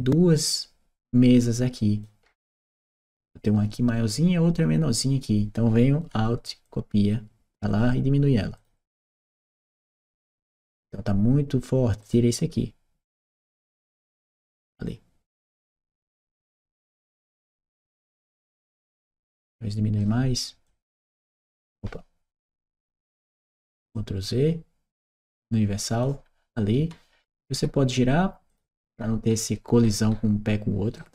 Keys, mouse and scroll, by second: 6.5 alt+click, 8.4 alt+click, 9.3-10.6 alt+drag, 11.9 alt+click, 13.2-15.4 alt+drag, 15.8-17.9 alt+right drag, 16.3 w, 16.6 d, 18.6-19.9 right drag, 19.0 w, 20.5-21.6 drag, 22.5 ctrl+z, 23.8-25.9 ctrl+drag, 26.4-27.7 ctrl+right drag, 26.7 s, 28.6-30.8 right drag, 28.7 d.